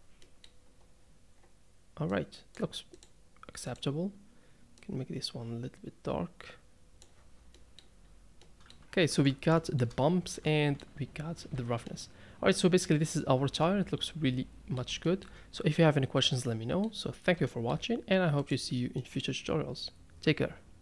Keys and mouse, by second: 0.4 middle click, 2.1 click, 7.5-8.0 middle drag, 8.4-9.0 middle drag, 9.1 ctrl+space, 9.6 shift+middle drag, 10.3-10.8 middle drag, 11.5 alt+a, 11.8-14.8 middle drag, 15.0 shift+middle click, 15.7-16.8 middle drag, 17.5 shift+middle drag, 18.4 click, 19.0 middle drag.